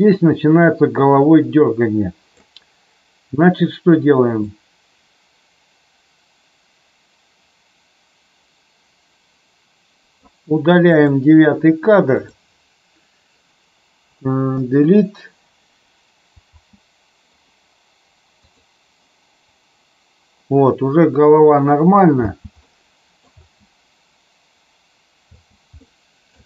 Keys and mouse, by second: 4.4-10.1 drag, 10.9 click, 14.5 Delete, 16.4 space, 18.4 click, 22.1 space, 22.5-23.1 middle drag, 23.3 space, 25.8-26.3 middle drag.